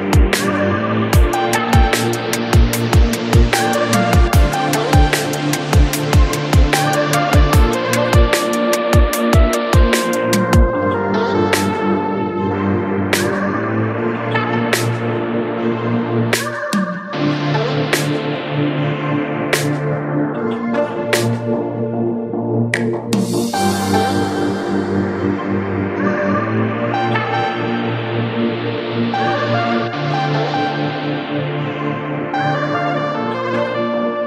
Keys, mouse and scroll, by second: 0.0 drag, 0.5 shift+click, 1.2 ctrl+p, 3.0 drag, 3.4 shift+click, 4.0-5.1 drag, 5.1-5.5 scroll down 6, 5.5 shift+middle click, 5.9-6.7 scroll down 2, 6.7-12.5 drag, 12.5-13.4 scroll up 15, 13.4-13.8 shift+scroll down 1, 13.9 shift+click, 14.1 drag, 15.3 click, 15.9 click, 16.4 shift+click, 17.1 ctrl+p, 18.1 drag, 18.3-18.6 scroll down 1, 18.6-19.1 shift+middle drag, 19.1 scroll down 1, 19.4 middle click, 20.2-20.5 scroll up 3, 20.5-22.1 shift+middle drag, 22.1 drag, 22.8 shift+click, 23.5 ctrl+p, 26.0 click, 26.6 click, 27.1 shift+click, 27.9-28.9 drag, 28.9-29.5 scroll down 13, 29.9-32.1 drag, 32.1-32.7 scroll up 5, 32.7 click, 33.1 scroll down 2, 33.4 click, 33.8-34.2 scroll up 9.